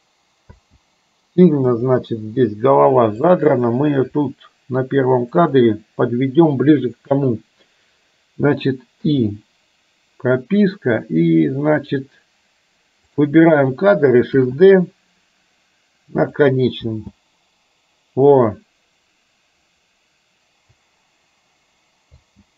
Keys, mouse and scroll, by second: 0.7 space, 1.8 click, 3.3 click, 4.3 r, 9.0 i, 11.8 click, 13.2 click, 14.4 shift+d, 16.9 space, 22.3 space.